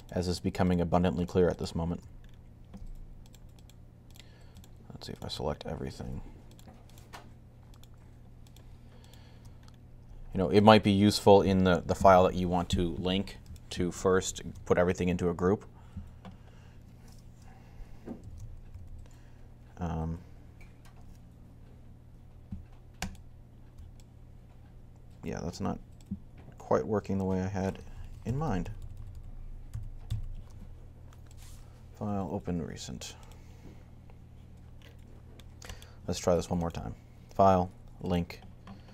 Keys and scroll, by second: 18.1 ctrl+g, 27.8 super+z, 28.2 super+z, 28.4 super+z, 28.6 super+z, 28.8 super+z, 28.9 super+z, 29.5 super+z, 29.8 super+z.